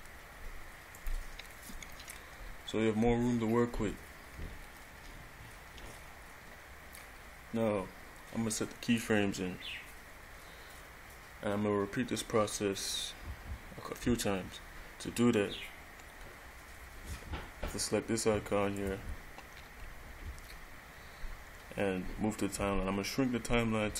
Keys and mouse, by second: 2.1 middle click, 2.2 click, 18.9 click.